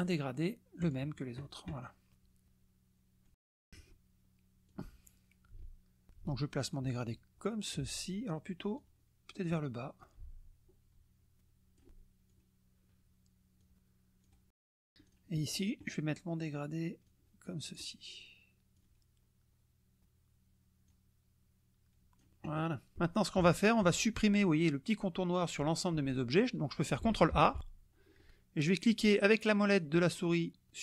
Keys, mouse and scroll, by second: 0.8 click, 2.4-3.9 drag, 4.7-6.1 drag, 6.7-7.8 ctrl+drag, 8.7 click, 10.0-11.9 ctrl+drag, 12.3 click, 13.6 click, 14.3 click, 14.3-14.8 scroll down 2, 15.1 click, 17.0 click, 18.7-20.0 drag, 20.9-22.4 drag, 23.4 KP_Subtract, 27.4 ctrl+a.